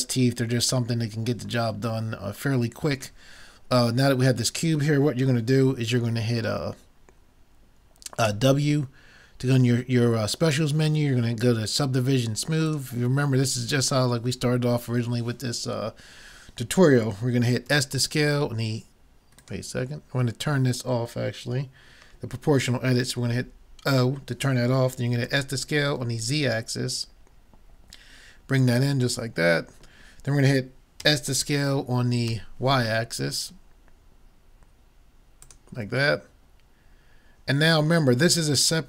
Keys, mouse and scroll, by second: 8.3 w, 17.7 s, 23.9 o, 25.3 s, 29.3-31.1 middle drag, 31.1 s, 35.5 click, 36.2 middle click, 37.2 scroll down 1, 37.5 scroll up 1, 37.7 middle click.